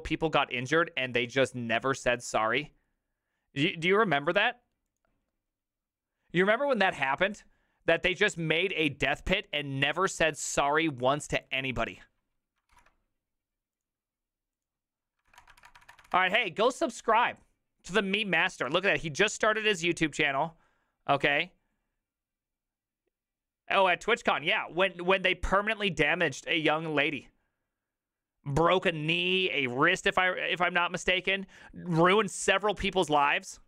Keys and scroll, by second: 15.3 ctrl+c, 15.3 ctrl+v, 15.4 Return, 15.6 ctrl+v, 15.7 Return, 15.9 ctrl+v, 15.9 Return, 16.2 Return.